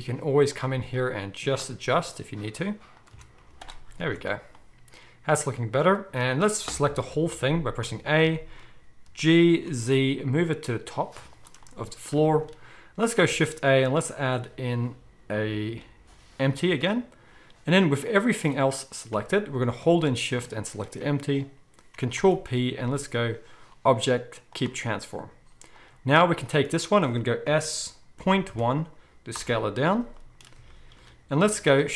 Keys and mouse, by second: 0.5-3.0 middle drag, 2.0 g, 3.0-19.6 right drag, 3.1 Tab, 3.4 z, 4.1 alt+a, 7.0 KP_1, 7.8 a, 9.0 g, 13.2 shift+a, 18.1-20.4 drag, 19.1 g, 20.4-25.7 shift+middle drag, 22.1 ctrl+p, 25.7 click, 27.5 s.